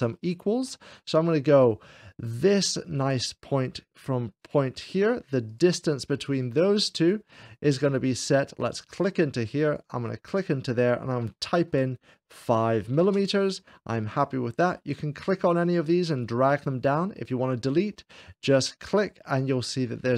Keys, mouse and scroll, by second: 0.4 shift+middle click, 3.1-5.3 drag, 5.5-7.8 drag, 8.7-10.5 drag, 11.7 5, 13.1 Return, 15.5-16.7 drag, 18.7 click.